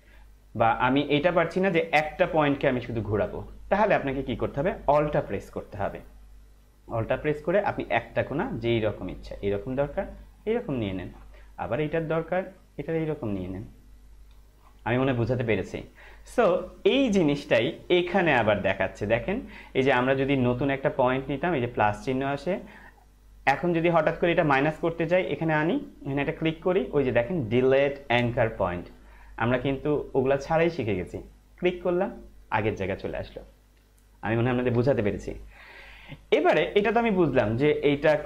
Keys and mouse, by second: 5.2 alt+Num_Lock, 6.5 alt+click, 12.2 alt+click, 18.0 right click, 31.4 click, 37.6 right click.